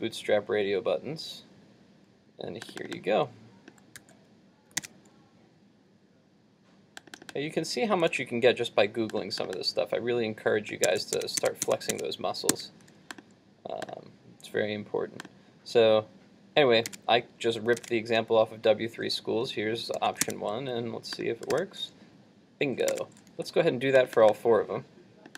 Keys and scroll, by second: 4.0 super+c, 4.9 super+Tab, 8.1 super+v, 16.9 super+Tab, 20.0 super+s, 20.4 super+Tab, 21.6 super+r, 23.0 super+Tab.